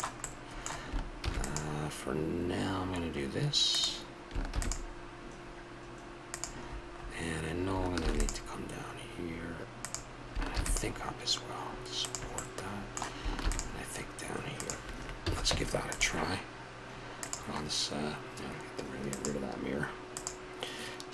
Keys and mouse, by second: 1.2 ctrl+r, 4.5 ctrl+r, 8.0 ctrl+r, 10.5 ctrl+r, 12.4 middle click, 13.4 ctrl+r, 15.2 a, 15.5 Tab, 19.7-21.1 drag.